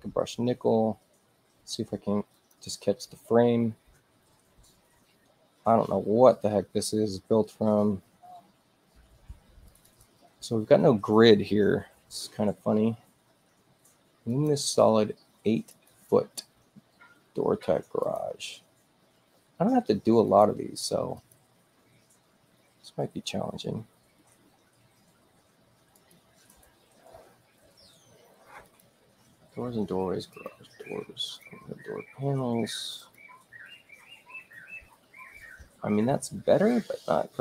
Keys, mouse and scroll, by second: 2.3 click, 9.1 space, 9.6 click, 9.8 click, 14.3 click, 15.7 click, 18.0 click, 20.2 click, 21.1 click, 25.9 click, 26.5 click, 28.6 click, 30.3 click, 31.3 click, 33.0 click.